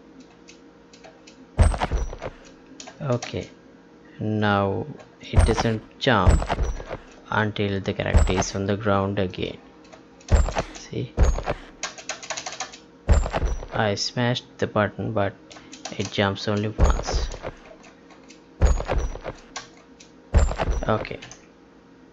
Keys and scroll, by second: 0.2 space, 5.0 space, 6.8 space, 9.9 space, 15.5 space, 21.2 ctrl+p.